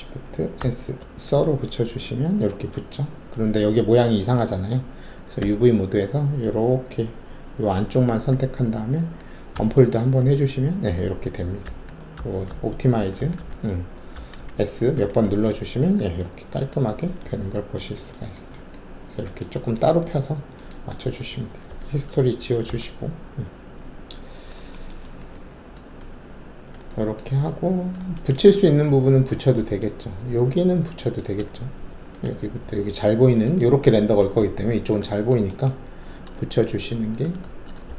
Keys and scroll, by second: 0.6 shift+s, 5.4 alt+4, 9.5 d, 12.1-14.6 typing, 16.9 alt+`, 22.6 alt+d, 31.3 alt+2.